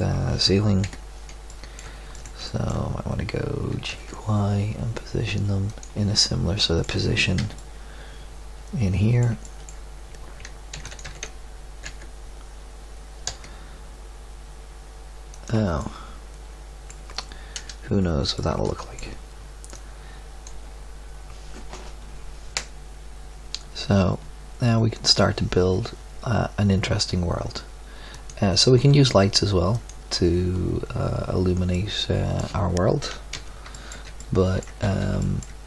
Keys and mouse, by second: 0.8 KP_7, 1.6 middle click, 3.7 g, 7.3 z, 10.7 shift+d, 11.0 g, 15.7-17.5 middle drag, 17.5 KP_0, 18.3 middle drag, 21.8 middle click, 33.3 z, 34.8 z.